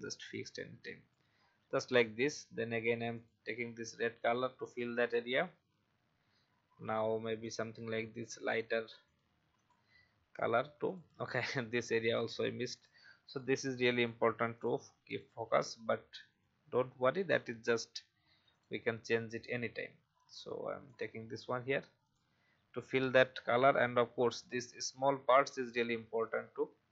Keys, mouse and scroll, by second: 1.9 scroll up 1, 3.1-4.2 drag, 5.3-7.4 scroll down 1, 7.4-17.4 drag, 23.3-23.6 alt+scroll up 1, 24.4 click, 25.0 alt+scroll down 1, 26.1 alt+scroll down 1.